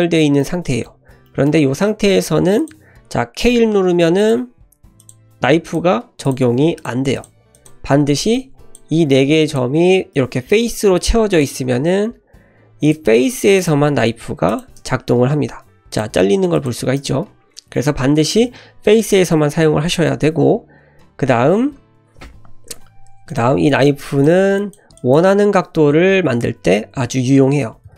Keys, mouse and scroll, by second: 0.4 middle click, 1.0 scroll down 1, 1.3 middle click, 1.7-2.2 scroll up 2, 2.6 click, 3.5 k, 9.1 click, 10.1 f, 11.3 click, 12.8 click, 13.6-14.9 drag, 15.9-17.2 drag, 22.8 Escape, 23.3 click, 23.7 click, 24.1 shift+click, 24.6 shift+click, 25.0 shift+click, 25.4 ctrl+x, 27.9 k.